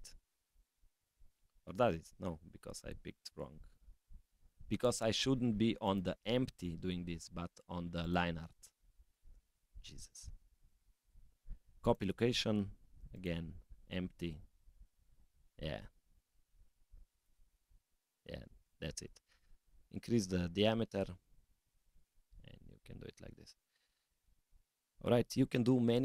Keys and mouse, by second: 1.2 middle click, 2.0-4.1 drag, 5.8 drag, 9.6-12.0 drag, 13.2-14.6 drag, 16.2 click, 17.0 g, 19.6 s.